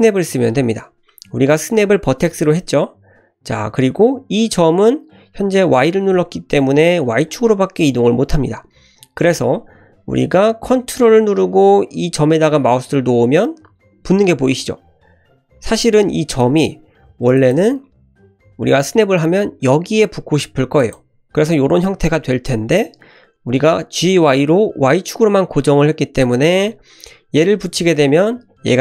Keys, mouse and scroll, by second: 16.4 click, 17.1 g, 18.2 g.